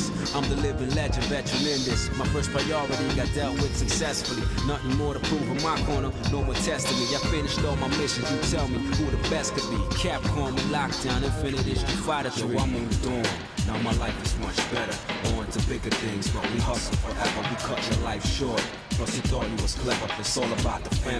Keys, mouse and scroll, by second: 0.2 scroll down 1, 0.5 middle click, 1.5 click, 2.4 click, 3.5 shift+middle click, 4.6 shift+middle click, 5.5 alt+shift+click, 8.3 f, 8.9 shift+middle click, 9.9 click, 10.5 shift+middle click, 11.2 ctrl+Tab, 12.5 click, 12.9 shift+click, 15.4 j, 16.0 click, 16.8 click, 17.4 shift+click, 19.1 j, 19.2 h, 20.1 ctrl+z, 21.0 middle click.